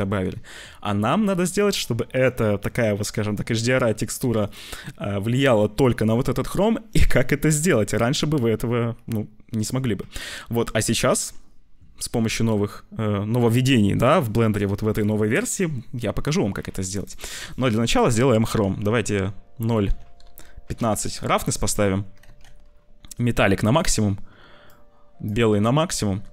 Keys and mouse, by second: 17.0-20.7 drag, 22.2 ctrl+s, 23.7 click.